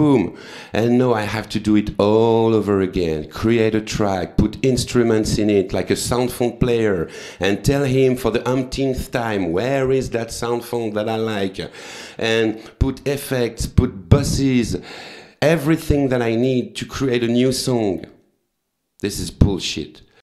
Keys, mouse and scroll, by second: 2.2 right click, 4.1 click, 4.8 click, 14.4 click, 15.3 click.